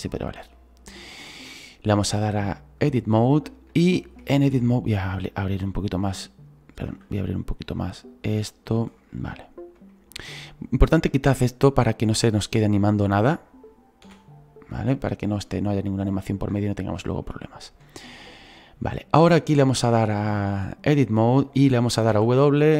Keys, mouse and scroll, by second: 1.2 scroll up 4, 3.0 click, 3.8 shift+middle click, 4.2 scroll down 2, 5.5 click, 8.2-9.2 drag, 9.2-13.1 shift+middle drag, 13.1-15.1 right drag, 15.1 Delete, 15.7-22.7 middle drag.